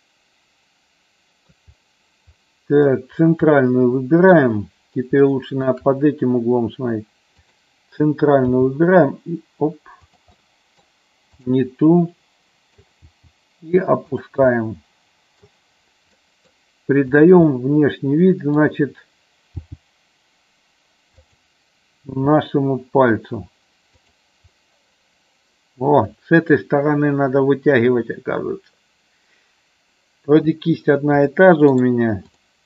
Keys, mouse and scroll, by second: 2.3 middle click, 3.5 middle click, 5.2 shift+middle click, 7.5 click, 8.5 g, 10.1 click, 10.3 middle click, 11.3 click, 12.0 middle click, 13.1 g, 14.2 click, 14.4-15.5 middle drag, 16.1 middle click, 17.5 middle click, 19.5 g, 21.1 click, 22.1 e, 24.0 click, 24.5-26.5 middle drag, 31.7 right click.